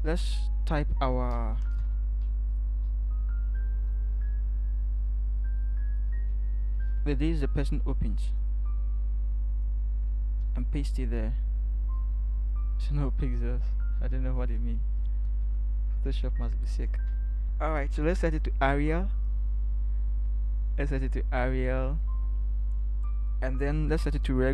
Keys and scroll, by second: 1.8 t, 6.8 ctrl+c, 10.5 ctrl+v, 15.3 ctrl+v.